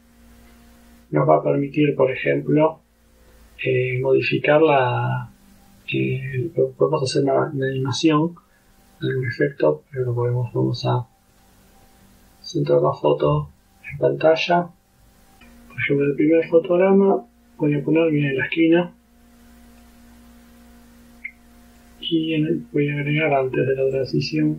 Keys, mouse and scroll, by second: 6.9-8.8 drag, 11.4 click, 15.4-20.1 drag, 21.8 click, 24.0 click.